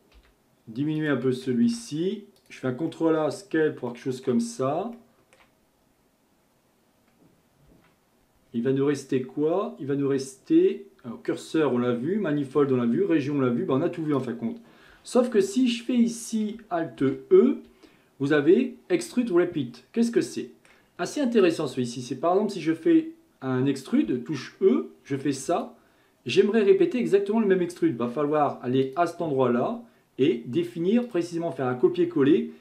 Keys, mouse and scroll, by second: 0.2 s, 1.7 ctrl+a, 2.9-4.5 middle drag, 4.5-5.0 scroll up 2, 5.0-7.7 shift+middle drag, 7.7 Tab, 9.1-12.3 drag, 15.4 KP_1, 17.0 alt+e, 20.2-21.4 middle drag, 21.4 click, 24.1 e, 28.9-32.6 drag.